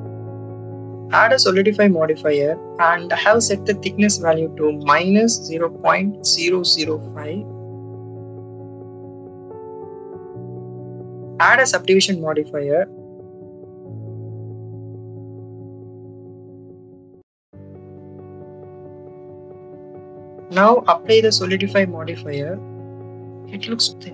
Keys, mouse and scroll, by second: 1.5-2.8 drag, 4.4 click, 4.6 click, 5.5-6.7 drag, 9.5 Tab, 11.8-13.4 drag, 16.9 click, 21.1 click, 23.4 click, 23.7 click.